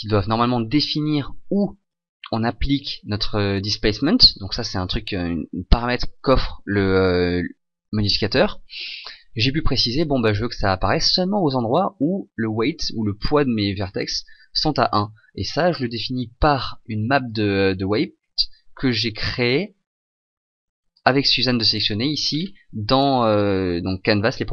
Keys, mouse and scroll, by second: 21.0 click, 22.3-24.1 scroll down 1, 24.1 scroll down 1.